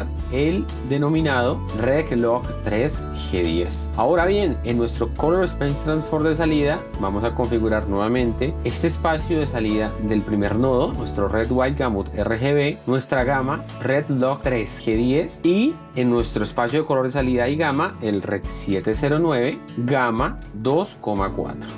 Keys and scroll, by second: 0.2 r, 4.8 F1, 8.6 r, 13.6 r, 19.1 r.